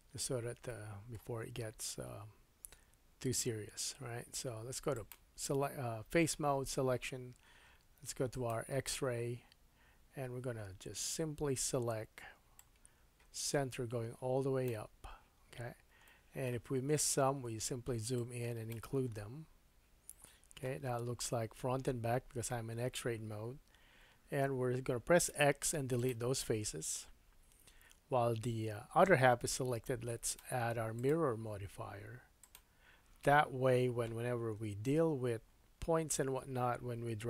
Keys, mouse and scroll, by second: 0.3 scroll up 1, 1.5-3.0 scroll up 2, 3.0-3.5 scroll down 1, 4.9-30.3 drag, 15.5-15.9 scroll up 3, 16.0 shift+middle click, 16.7-17.7 scroll up 7, 19.2-19.8 scroll down 3, 20.2 shift+middle click, 20.9 scroll down 4, 23.7-25.3 scroll down 2, 25.5 x, 26.9 Tab, 30.3 middle click, 30.9-37.2 drag, 34.5 KP_3, 35.0 Tab, 35.5-36.2 scroll up 3.